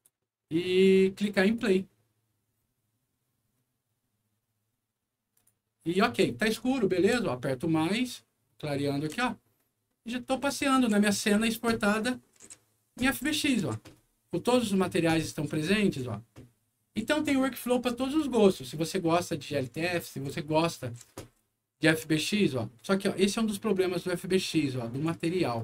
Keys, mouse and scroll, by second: 1.4 click, 5.3 click, 5.6-6.4 typing, 9.3 w, 10.4 d, 11.3 s, 13.2 s, 15.5 w, 22.8-25.5 right drag.